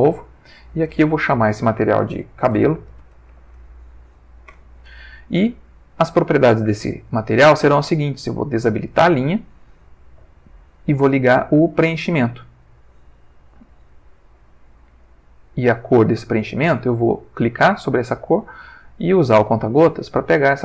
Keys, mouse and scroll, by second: 0.4 click, 2.6-3.3 typing, 3.5 shift+Page_Down, 4.5 Return, 8.9 click, 12.4 click, 15.0 click, 17.7 click, 19.0 click.